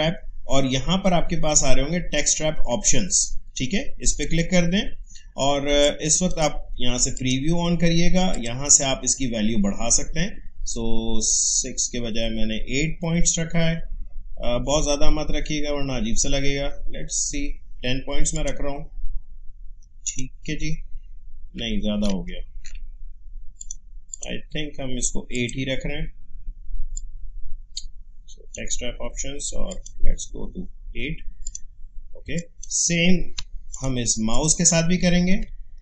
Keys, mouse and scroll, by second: 4.1-7.1 drag, 9.7 scroll up 1, 14.1 scroll up 1, 18.3 click, 19.1 alt+scroll down 1, 20.1 click, 22.1 ctrl+z, 23.6-29.7 drag, 30.2-31.4 scroll up 1, 31.4 click, 32.3 space, 32.3 click, 32.8 space, 33.7 click, 34.1 space, 34.3 click, 34.6 space, 35.1 scroll up 2.